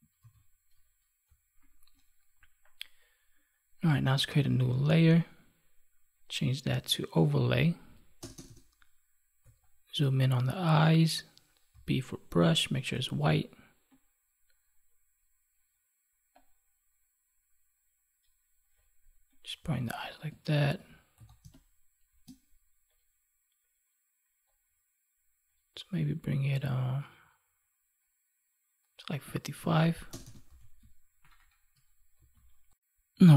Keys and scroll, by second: 0.1 ctrl+s, 20.5 ctrl+1, 21.3 space, 29.5 ctrl+s, 30.4 ctrl+s, 31.6 ctrl+=, 32.1 ctrl+s.